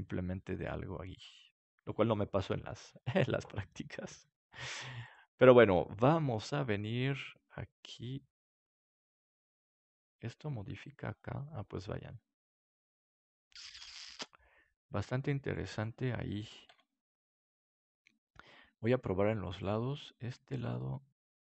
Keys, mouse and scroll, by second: 2.4 KP_7, 4.0 middle click, 5.0-6.8 right drag, 6.7-8.4 drag, 6.7 middle click, 16.2 middle click, 16.6 ctrl+z, 18.2-21.0 middle drag, 19.5-21.0 drag, 21.4 middle click.